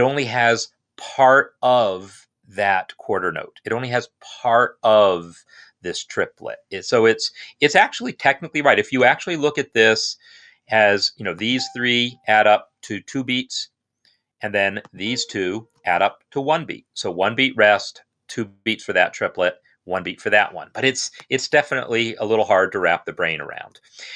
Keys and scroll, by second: 11.9 shift+Right, 12.1 shift+Right, 15.1 shift+Right.